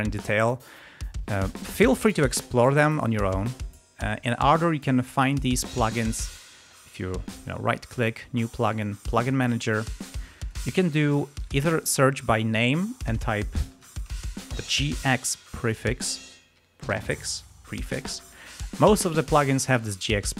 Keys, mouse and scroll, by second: 3.6 scroll up 2, 5.2 space, 6.0 click, 7.4 right click, 9.0 click, 10.3 click, 11.3 click, 12.2 click, 12.7 click, 13.7 ctrl+a, 14.6 shift+g, 15.0 shift+x.